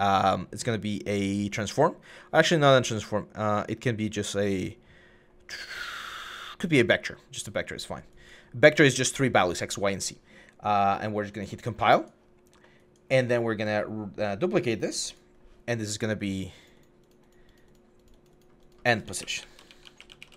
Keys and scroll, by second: 19.0-20.3 typing.